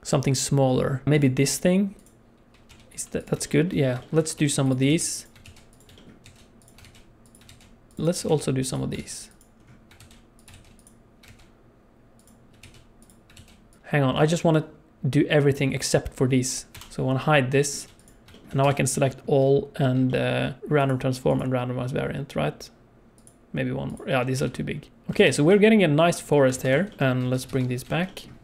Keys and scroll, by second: 2.7 g, 4.3-11.3 typing, 12.6 shift+d, 13.5 shift+d, 14.2 alt+a, 16.7 h, 18.6 a, 24.4 g, 25.0 alt+a, 25.2 ctrl+s, 26.5 ctrl+s, 27.4 alt+h, 27.5 alt+h, 27.8 alt+a, 28.1 ctrl+s.